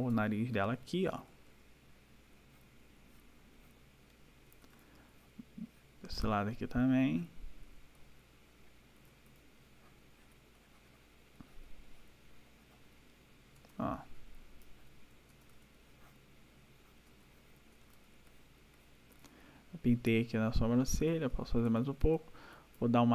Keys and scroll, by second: 1.1 ], 4.5 ], 7.6 ], 8.9 ], 13.5 \, 17.0 \, 20.5 ].